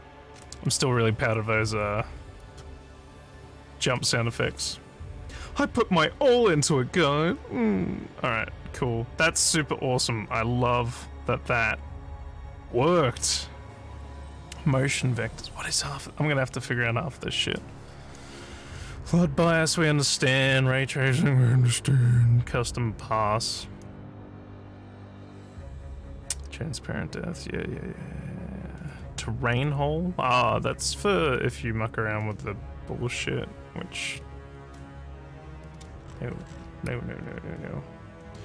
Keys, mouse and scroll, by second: 2.4 click, 9.5 click, 36.0-36.6 scroll down 3, 36.9-38.4 alt+drag.